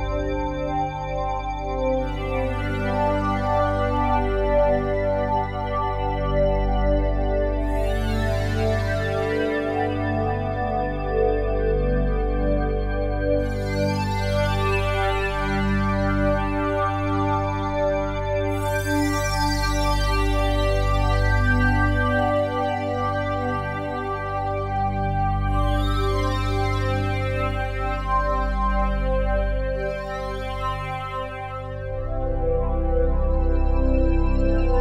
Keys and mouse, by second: 0.9 click, 1.1 click, 3.2-3.6 typing, 4.4 click, 4.9 alt+click, 5.6 ctrl+alt+click, 6.2 alt+shift+click, 6.4-6.7 alt+shift+drag, 7.0-7.3 alt+drag, 8.3 click, 9.6 Delete, 11.2 alt+click, 13.0 click, 13.5-15.8 shift+drag, 13.5 typing, 16.1-18.5 drag, 19.0 shift+click, 20.2 click, 20.8 click, 21.9 shift+click, 22.9-24.6 shift+drag, 25.7-29.5 shift+drag, 29.8 ctrl+l, 30.9 Down, 31.1 Down, 31.1-32.0 typing, 33.5 alt+a, 34.5-34.8 alt+drag.